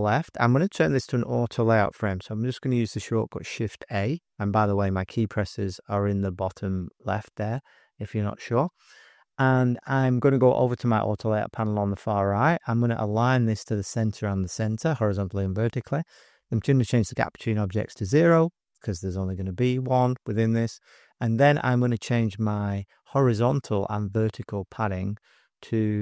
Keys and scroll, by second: 3.5 shift+a, 18.0 0, 20.8 Tab, 21.2 Tab.